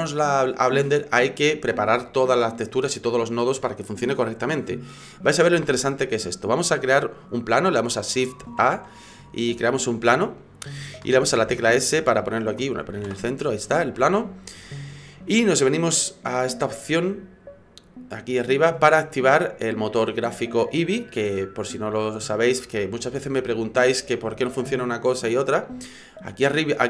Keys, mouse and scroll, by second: 8.4 shift+a, 11.5 s, 13.0 alt+g, 14.0 middle click, 19.2 click.